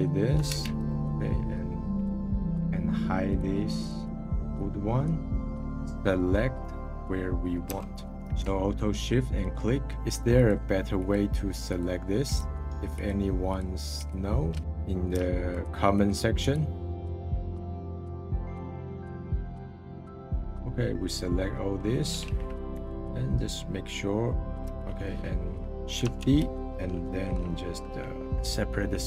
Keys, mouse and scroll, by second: 0.4 shift+d, 1.6-2.1 scroll down 20, 2.3 click, 3.3-5.7 drag, 5.7-7.2 middle drag, 7.2-7.7 scroll up 3, 7.7 Tab, 8.1 middle click, 9.4 alt+shift+click, 12.9-14.6 alt+shift+drag, 14.6 middle click, 15.5-20.5 alt+shift+drag, 20.5-22.7 middle drag, 22.7 /, 23.2-24.6 middle drag, 24.6 /, 25.1-25.7 scroll down 10, 26.0 shift+d.